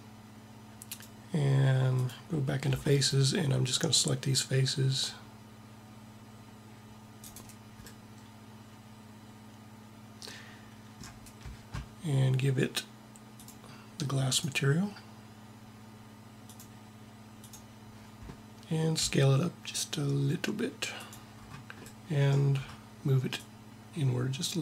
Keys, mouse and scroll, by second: 0.8-2.6 drag, 2.6 c, 7.1-8.6 drag, 13.3-15.9 drag, 18.9 s, 23.2-24.6 drag.